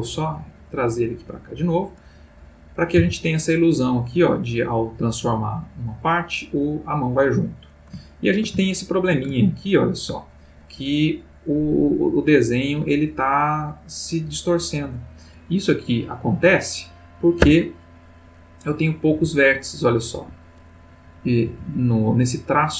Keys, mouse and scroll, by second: 1.0 click, 2.3 click, 3.0 r, 7.7 ctrl+click, 8.6-9.3 ctrl+shift+middle drag, 9.4-10.1 ctrl+shift+middle drag, 15.6 click, 17.4 Tab, 18.5 click, 19.1 g, 20.2 Escape, 21.0 click, 21.5 g.